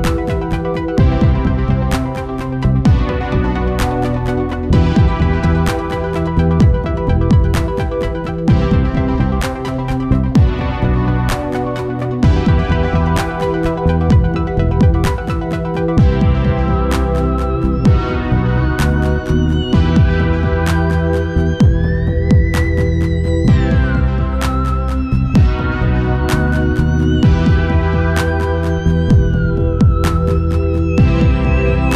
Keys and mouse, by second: 0.7 middle click, 4.6-13.6 right drag, 13.6 click, 14.3 ctrl+z, 14.6 click, 15.4 middle click, 15.5-17.2 right drag, 17.3 KP_1, 18.3 KP_3, 19.4 z, 21.6 click, 25.3-27.1 right drag, 27.2-30.1 right drag, 28.5-30.3 drag, 30.7-31.9 drag, 31.5 ctrl+s.